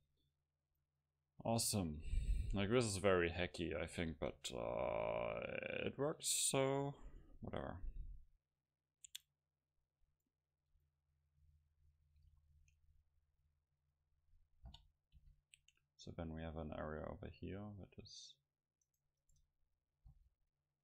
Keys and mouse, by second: 0.3-2.1 middle drag, 4.4 KP_0, 9.5 Tab, 10.4-12.0 middle drag, 12.3 a, 14.8 o, 15.2 c, 19.3 right click, 20.2 ctrl+t.